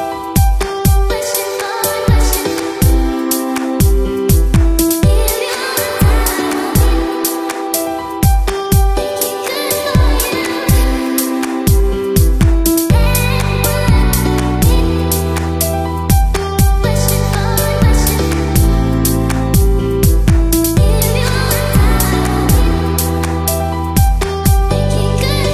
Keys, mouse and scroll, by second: 0.1 click, 0.2-0.5 scroll down 5, 0.4 shift+middle click, 0.5-1.0 scroll up 8, 0.7 shift+middle click, 1.6 middle click, 1.8 scroll down 1, 2.4 click, 2.4 scroll up 3, 3.3 click, 3.3 f, 3.4 click, 3.5 f, 3.6 click, 3.9 middle click, 3.9-4.3 scroll down 2, 6.9 click, 7.0 shift+click, 7.3 shift+click, 7.3 right click, 7.9 click, 8.1 shift+click, 9.5 click, 9.7 g, 10.3 click, 10.5 middle click, 10.9 click, 11.0 shift+click, 11.2 right click, 11.4 click, 11.6 shift+click, 11.6 f, 11.7 f, 11.9 click, 12.0 scroll down 4, 12.4 click, 12.4-12.7 scroll up 4, 12.8 shift+click, 12.9-16.5 typing, 14.9 shift+middle click, 20.1 e, 20.4 s, 20.7 e, 20.9 s, 22.9 middle click, 22.9 scroll up 1, 23.2 shift+middle click, 23.2 click, 24.0 alt+click, 24.4 alt+click, 24.6 shift+click, 24.6 middle click, 25.1 e, 25.4 middle click.